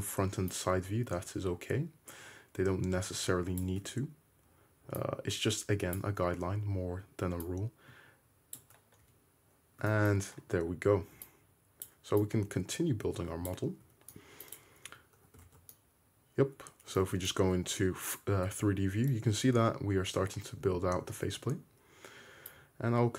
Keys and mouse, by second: 0.5-14.5 drag, 9.0 `, 13.9 `, 14.9 `, 15.5 alt+z, 15.7-17.3 drag, 17.1 Tab, 19.4 `, 20.3 `, 21.4 Tab, 21.4-22.6 middle drag, 22.6-23.1 drag.